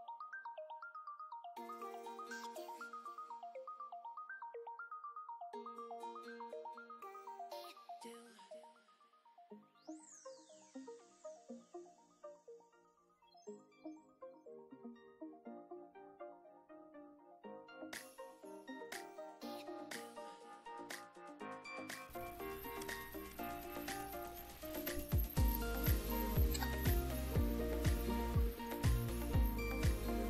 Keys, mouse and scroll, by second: 0.1 click, 0.3 ctrl+d, 0.5 ctrl+click, 1.2 click, 1.4-2.3 typing, 2.4-2.7 drag, 3.1 click, 3.8 click, 4.2 ctrl+d, 4.4 ctrl+click, 5.5 click, 5.9 click, 6.7 click, 7.3 click, 7.9 ctrl+d, 8.0 ctrl+click, 8.9 click, 9.5 click, 10.1 click, 10.5 click, 11.3-12.1 typing, 12.3 ctrl+d, 12.5 ctrl+click, 13.3 click, 13.9 click, 14.7 click, 15.0 click, 15.1-16.1 typing, 16.2 ctrl+click, 16.4 ctrl+d, 16.5-16.9 ctrl+drag, 17.3 click, 17.7 click, 18.3 click, 18.7 click, 18.9-19.7 typing, 21.5 click, 21.9 click, 22.9-26.9 typing, 29.5 click.